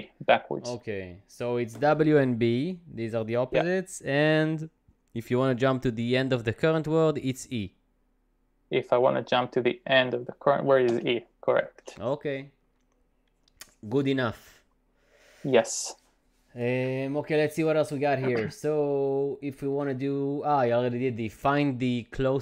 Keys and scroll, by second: 11.0 e.